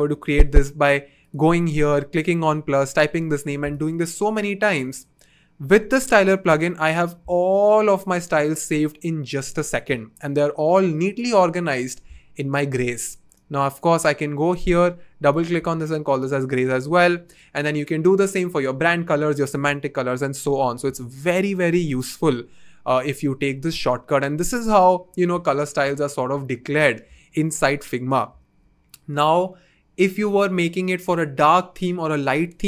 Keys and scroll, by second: 5.8 BackSpace, 15.5 s.